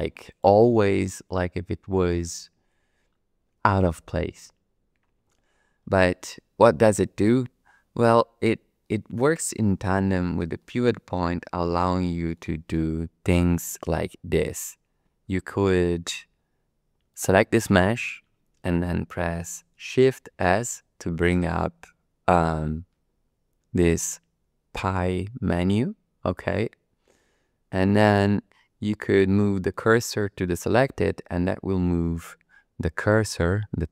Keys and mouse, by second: 0.3 shift+click, 8.8-10.2 middle drag, 10.6 shift+middle click, 11.2-12.3 middle drag, 17.1 click, 20.3 shift+s.